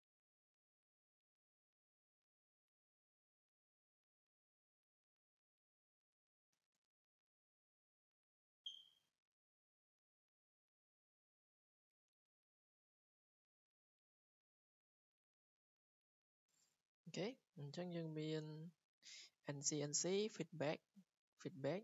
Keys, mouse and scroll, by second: 0.8 click, 1.1 Escape, 1.5 scroll up 3, 1.9-2.3 scroll down 3, 2.6 scroll, 4.0 click, 4.3 click, 5.0 click, 6.3-6.8 typing, 9.7 click, 11.9 click, 12.2 Escape, 12.7 w, 13.3 click, 14.1 click, 15.2 click, 15.9 click, 16.4 Escape, 16.6 Escape, 16.7-17.3 scroll down 8, 17.6-17.9 scroll up 3, 17.9-18.8 scroll, 20.1 Escape, 20.9 click.